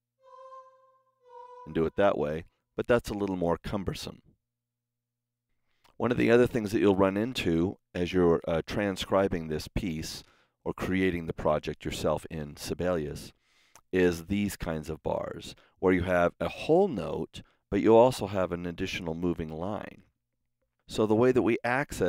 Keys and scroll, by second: 2.5 super+z, 3.1 super+z, 4.7 Escape.